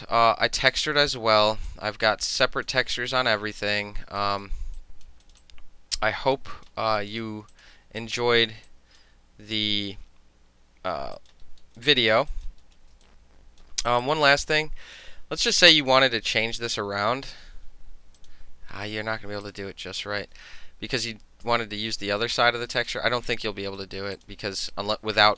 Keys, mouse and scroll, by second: 0.7 alt+middle click, 1.0 alt+middle click, 1.2 alt+right click, 1.5 alt+middle click, 1.7-2.7 alt+drag, 2.7 alt+middle click, 3.2 alt+middle click, 3.6 alt+middle click, 4.1 alt+middle click, 4.3 alt+right click, 4.5 alt+middle click, 4.8 alt+click, 5.1 alt+middle click, 5.3 alt+right click, 5.4 alt+middle click, 5.5 alt+click, 6.4 alt+middle click, 6.6 alt+right click, 7.1 alt+middle click, 7.2 alt+right click, 7.3 alt+middle click, 7.6 click, 7.7 alt+middle click, 8.1 alt+click, 8.5 alt+middle click, 8.7 alt+click, 9.1-10.9 alt+middle drag, 11.2 alt+click, 11.5 alt+middle click, 11.9 alt+click, 12.1 alt+middle click, 12.4 alt+click, 12.5 alt+right click, 12.5 alt+middle click, 12.8-13.1 alt+middle drag, 13.1 alt+right click, 13.7 alt+middle click, 14.0 alt+click, 14.1 alt+middle click, 15.6-16.9 drag, 18.3 click, 19.5 click, 21.2 ctrl+z, 21.5 ctrl+z, 22.8 click, 23.4-23.9 right drag, 23.9-24.2 middle drag, 24.2 click, 24.3-24.8 middle drag, 24.8 alt+right drag, 25.0-25.3 alt+middle drag.